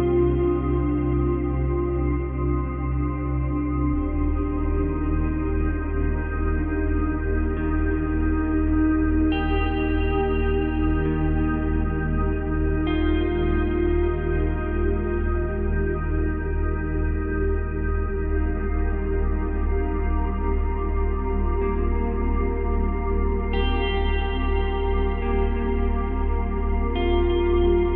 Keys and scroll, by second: 18.7 ctrl+z.